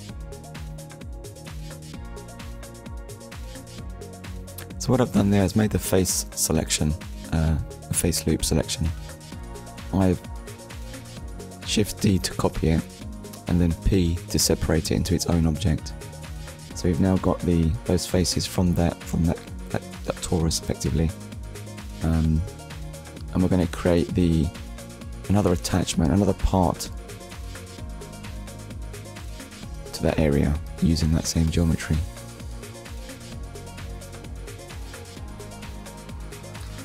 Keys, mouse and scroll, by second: 2.8 shift+d, 4.1 right click, 7.4 click, 8.6 Tab, 9.8 click, 11.0-11.4 scroll down 1, 12.2 click, 14.1 click, 15.8 click, 17.6 shift+h, 17.9 a, 18.1 n, 19.5 shift+a, 21.6-23.8 typing, 26.5 click, 27.3 click, 28.2 Return, 29.8 click, 32.7 click, 34.3-35.8 typing.